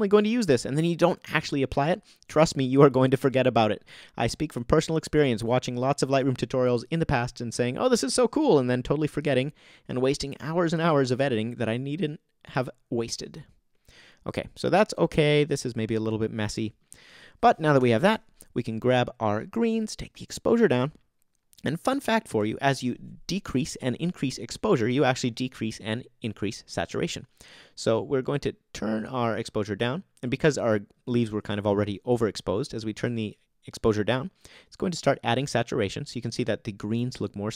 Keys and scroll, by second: 17.8 alt+super+o.